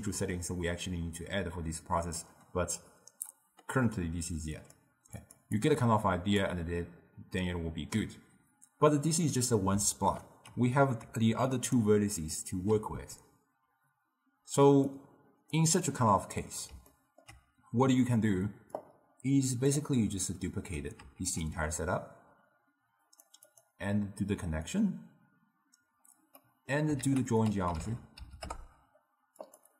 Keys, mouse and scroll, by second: 4.7 click, 5.3 click, 5.7-8.7 drag, 11.1 d, 11.6 click, 11.8-12.2 d, 12.3 click, 12.6 d, 15.0 click, 15.9 middle click, 17.0-18.9 ctrl+middle drag, 18.9-21.2 drag, 21.2 shift+d, 23.6 click, 24.8 click, 26.5 middle click, 27.1 ctrl+a.